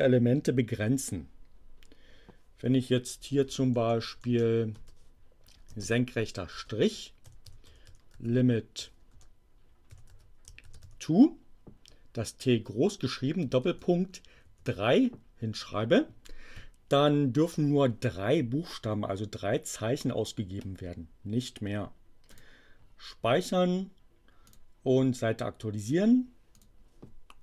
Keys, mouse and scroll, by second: 3.3 BackSpace, 4.7 space, 5.7 alt+<, 6.4-10.8 typing, 13.6 shift+., 14.4 3, 22.2 click, 24.4 click, 26.5 click.